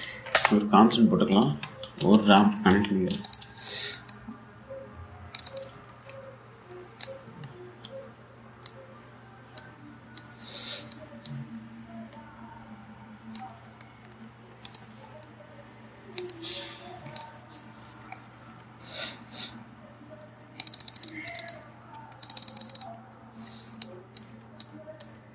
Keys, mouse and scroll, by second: 0.0-0.2 typing, 0.7 Down, 1.7 Return, 1.9 click, 2.1 Tab, 2.2-3.8 typing, 3.9 click, 4.3-4.6 scroll up 1, 4.6 click, 6.0 click, 6.4-7.3 typing, 7.7-15.0 drag, 15.3 click, 16.8 click, 18.5-19.6 scroll down 1, 21.2-25.3 drag.